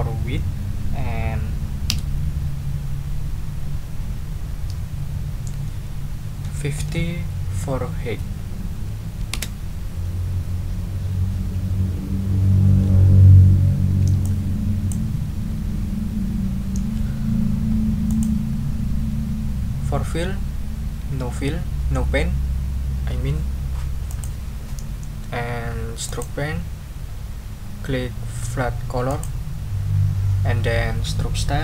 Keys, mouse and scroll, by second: 1.9 Tab, 6.4 5, 6.7 0, 9.3 Return, 13.2 ctrl+scroll up 2, 14.2 ctrl+click, 18.1 click, 24.1 click, 26.0 click, 29.1 click.